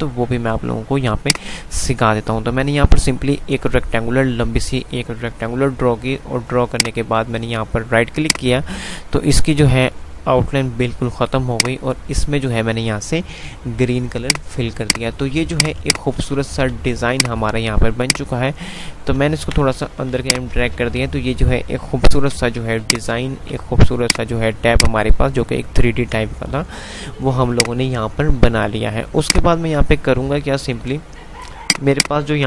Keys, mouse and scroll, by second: 8.3 right click, 11.8 click, 12.4 click, 16.0 click, 16.4 c, 16.7 c, 17.4 click, 19.2 ctrl+r, 20.4 click, 20.8 c, 22.2 ctrl+g, 23.0 click, 23.3 c, 24.0-26.8 drag, 26.8 F3, 27.8 click, 28.4 F3, 29.2 click, 29.4 F2, 30.3 click, 30.5 F2, 31.7 click.